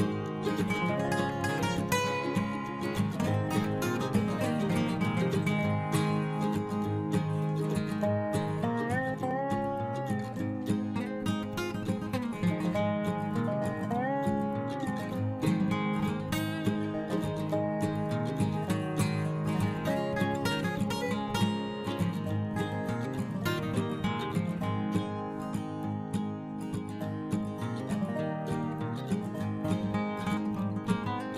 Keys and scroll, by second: 15.5 ctrl+t.